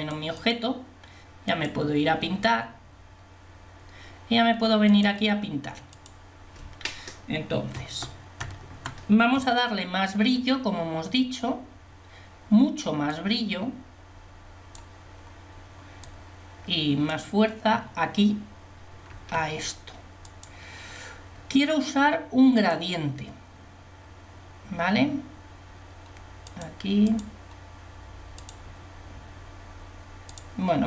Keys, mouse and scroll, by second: 0.0 click, 1.7 click, 20.3 f.